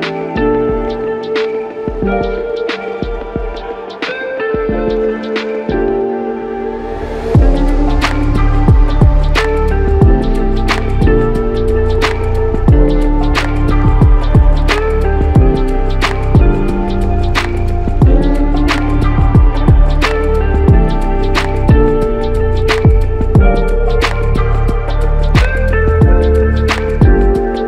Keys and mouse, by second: 1.6-2.1 typing, 4.9 typing, 7.8 double click, 14.2 alt+click, 17.2 ctrl+z, 17.4 ctrl+z, 18.1 ctrl+z, 18.6 ctrl+z, 18.8 ctrl+z, 19.3 ctrl+z, 19.5 ctrl+z, 19.7 ctrl+z, 21.4 alt+click, 22.2-22.6 typing, 25.1 double click, 26.1 alt+click, 27.4 double click.